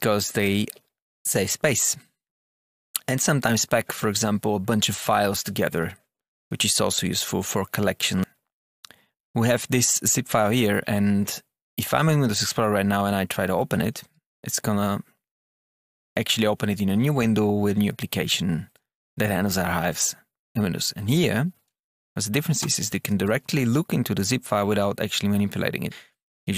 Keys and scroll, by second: 22.5 Return, 23.2 Down, 25.9 Return.